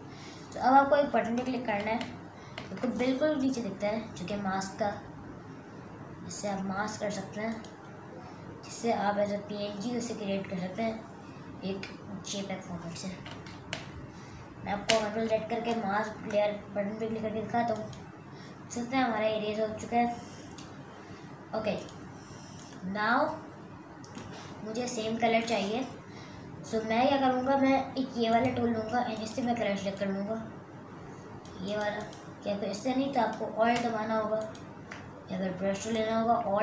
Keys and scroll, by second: 2.1 super+KP_Add, 13.9 KP_Subtract, 14.9 super+KP_Subtract, 15.9 ctrl+super+z.